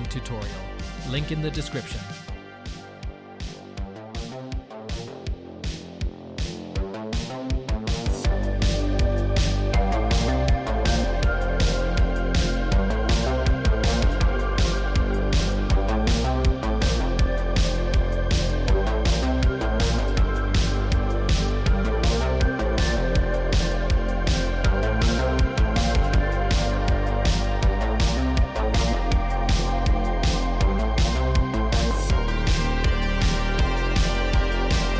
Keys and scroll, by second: 1.5 Tab, 9.1 g, 13.3 g, 16.8 Tab, 17.7 Tab, 19.6 Tab, 19.8 2, 20.8 shift+s, 21.7 Tab, 22.4 Tab, 23.2 shift+s, 23.7 Tab, 24.9 Tab, 26.1 2, 26.6 1, 27.4 shift+s, 27.9 Tab, 28.5 Tab, 29.1 shift+s, 29.6 Tab, 31.1 Tab, 31.4 2, 32.4 shift+s, 34.3 shift+s, 34.6 Tab.